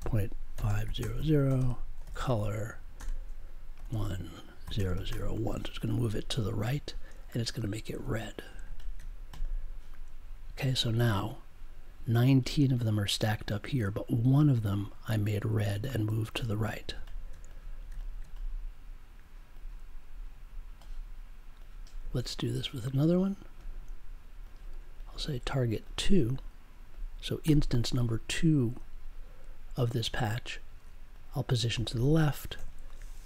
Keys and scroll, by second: 0.0-5.7 typing, 27.4 2, 32.5 -.